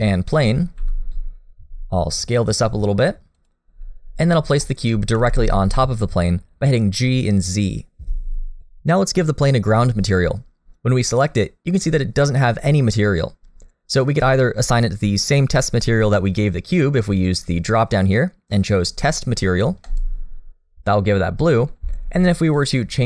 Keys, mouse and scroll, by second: 0.8 s, 4.2 click, 4.6 middle click, 4.9 scroll up 1, 5.1 g, 9.8 click, 17.2 click, 21.1 middle click, 22.5 click.